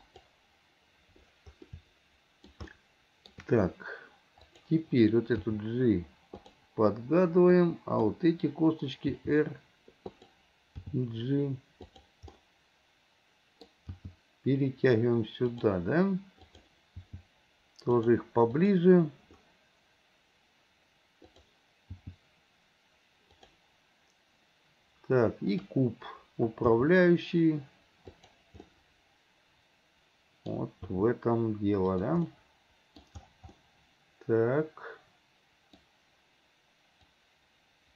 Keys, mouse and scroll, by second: 1.8-3.5 shift+middle drag, 4.5 click, 7.5-8.3 drag, 12.4-13.9 middle drag, 14.0 g, 16.5 click, 17.1 g, 18.5 click, 21.3 click, 22.0 g, 26.8 g, 28.7-31.0 middle drag, 31.0 g, 32.5-37.1 middle drag, 37.1-37.9 drag.